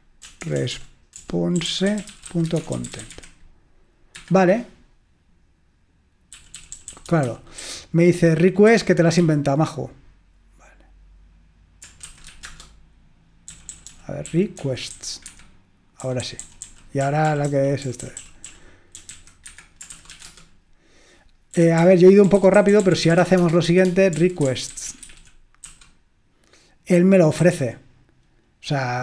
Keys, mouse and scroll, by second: 0.0-4.2 typing, 6.4-9.3 typing, 10.6 typing, 12.1-20.3 typing, 15.3 Escape, 21.4-25.7 typing, 27.5 typing.